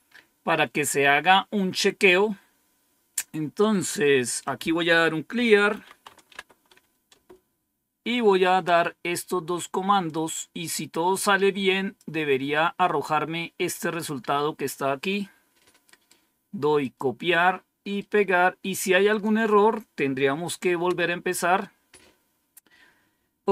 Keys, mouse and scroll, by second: 1.2-1.5 scroll down 1, 4.3 click, 5.0-6.7 typing, 7.0 Return, 10.0-11.9 drag, 15.8 right click, 16.7 click, 17.9 right click, 19.0 click, 20.8 Return.